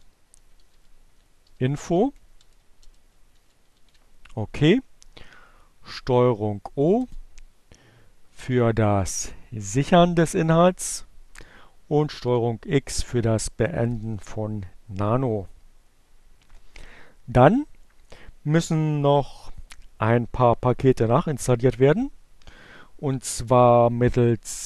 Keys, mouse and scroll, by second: 0.0-2.7 typing, 5.1 ctrl+o, 6.1 Return, 10.3 ctrl+x.